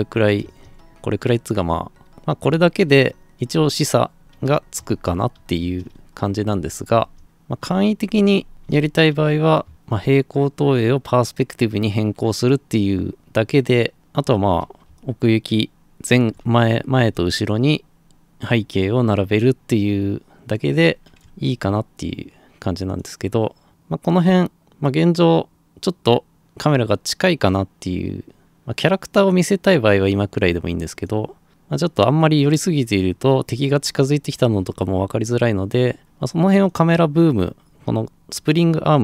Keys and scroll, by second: 0.0-10.3 typing, 14.8 Escape.